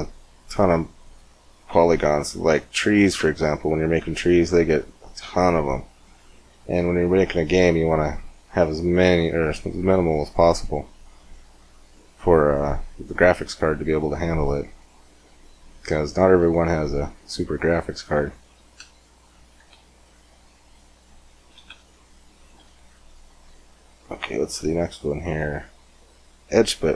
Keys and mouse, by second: 3.1 Tab, 3.8 Tab, 5.1 x, 8.4-12.4 middle drag, 11.1 shift+a, 14.9-17.1 middle drag, 19.4 shift+s, 22.3 shift+s, 24.4-26.9 drag.